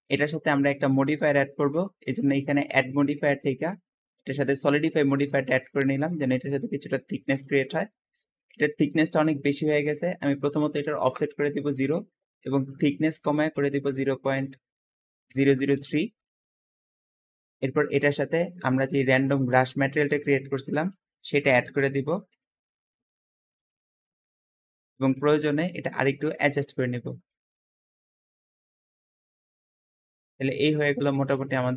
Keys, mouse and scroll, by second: 1.9 shift+click, 4.4 click, 5.8-7.9 middle drag, 7.9-8.3 scroll up 1, 8.3-9.9 shift+middle drag, 9.9-15.4 shift+drag, 10.6-11.3 typing, 11.1 Return, 13.0-13.6 typing, 14.8 KP_Decimal, 15.2 KP_0, 15.7 KP_3, 16.1 Return, 16.7-17.2 scroll down 2, 16.9 middle click, 17.4 click, 18.4 click, 20.0-23.2 drag, 20.9-22.8 typing, 24.8-26.3 shift+middle drag, 26.2 Tab, 27.3 click, 27.7 s, 28.2 click, 28.5 s, 28.9 middle click, 29.0 click, 29.3 s, 29.5 click, 29.8 Tab, 29.9-31.7 middle drag.